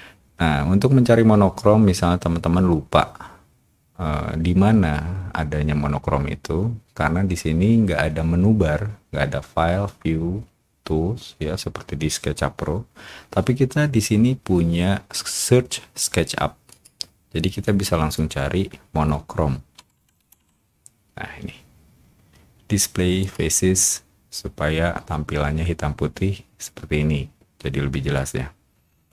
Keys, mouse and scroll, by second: 16.7 click, 19.5-20.8 typing, 23.2 click.